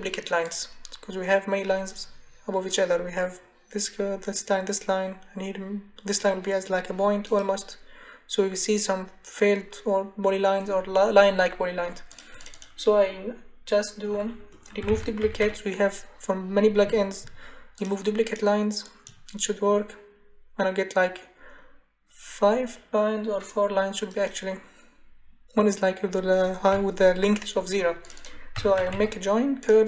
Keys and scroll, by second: 14.5-15.9 typing, 28.3-29.4 typing.